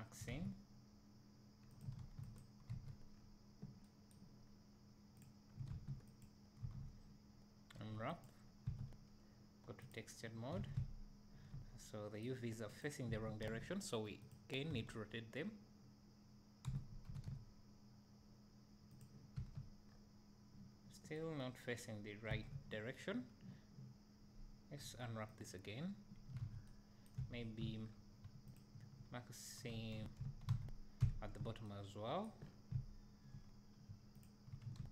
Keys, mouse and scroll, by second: 0.3 alt+a, 1.8 click, 2.4 ctrl+e, 2.7 alt+a, 3.1-3.8 scroll down 1, 4.5-5.2 scroll up 1, 5.2 click, 6.2 ctrl+e, 6.6 a, 8.7 Tab, 10.0 click, 10.6 alt+a, 12.8 click, 13.1 Tab, 13.5 a, 14.3 click, 14.7 a, 16.7 r, 19.0 click, 19.4 Tab, 19.9-20.2 scroll up 2, 22.6 Tab, 27.0 middle click, 27.2 `, 27.8 scroll up 1, 28.5 alt+click, 29.9 a, 30.7 a, 32.6 scroll down 1, 32.8 `, 34.3 alt+click.